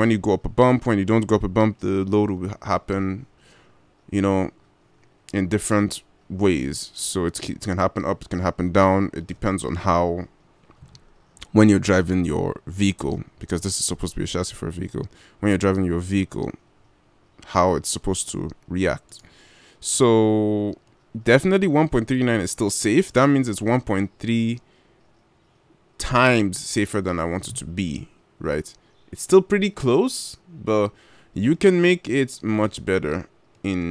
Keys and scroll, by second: 19.5 g.